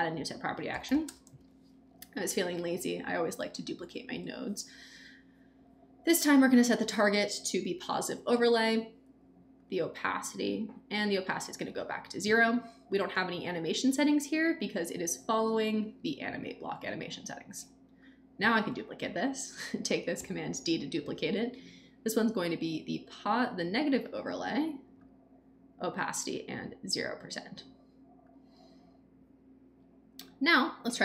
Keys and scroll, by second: 0.4-1.8 typing, 2.6 Down, 4.1 Return, 20.1 super+d.